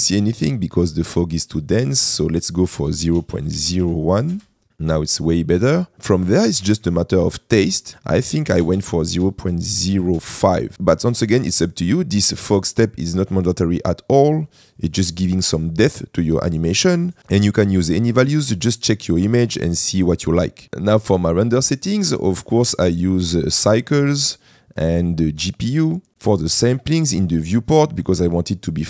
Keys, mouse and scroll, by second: 2.2-4.6 drag, 5.9-10.4 drag, 18.6 click.